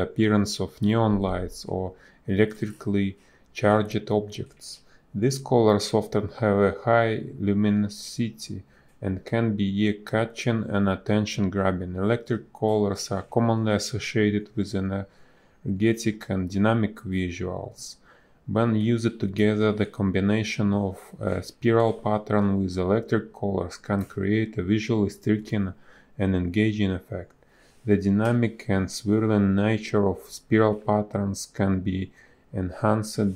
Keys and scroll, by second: 0.1 space, 0.7 b, 6.0 space, 10.0 space, 10.6 a, 12.3 space, 20.9 b, 21.0 space, 24.9 a, 30.5 space.